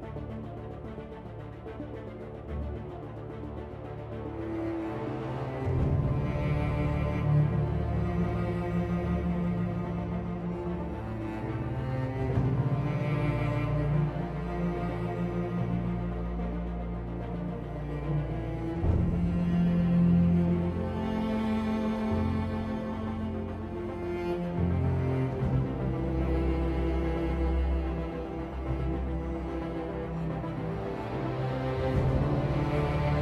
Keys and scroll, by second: 10.1 End, 24.6 End, 25.0 Home.